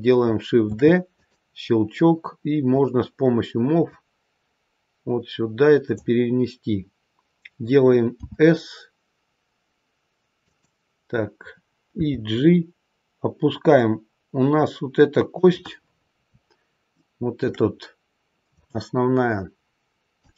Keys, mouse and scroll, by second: 0.6 shift+d, 2.7 click, 3.8 click, 8.1 s, 11.9 g, 15.7-16.2 scroll up 5, 16.7 scroll up 1, 16.8 shift+middle click, 20.1 click.